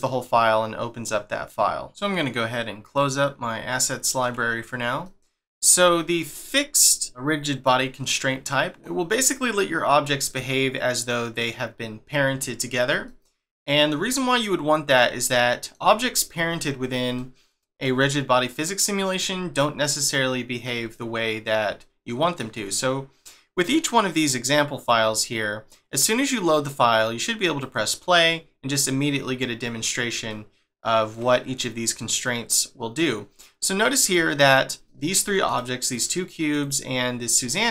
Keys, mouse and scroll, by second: 2.9 click, 3.8 middle click, 5.8-7.1 scroll up 1, 7.1 scroll up 1, 8.3-8.7 scroll down 1, 8.8 middle click, 10.3 middle click, 13.0 shift+middle click, 18.4-18.8 scroll down 1, 18.8-19.5 scroll up 1, 19.5 shift+middle click, 21.0 scroll down 1, 21.8 shift+middle click, 27.6 click, 29.7 scroll up 1, 30.3 shift+middle click, 34.0 click, 34.4 click, 34.9 shift+middle click, 35.5 click, 35.9 click, 36.5 click, 36.9-37.7 scroll up 1.